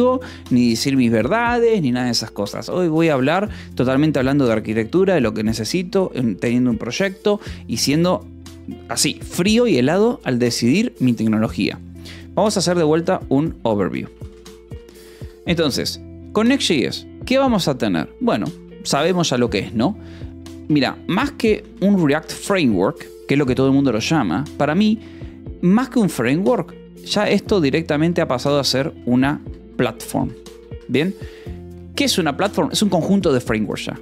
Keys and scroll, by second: 4.5 alt+Tab, 12.5-15.5 typing, 18.5 Return, 21.0-24.9 typing, 26.3 o, 26.9 BackSpace, 27.1 -, 28.0 space, 29.1-31.5 typing.